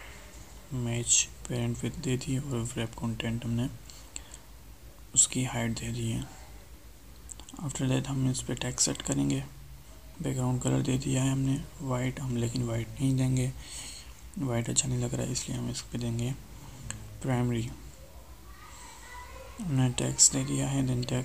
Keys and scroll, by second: 1.3 ctrl+Left, 5.0 ctrl+space.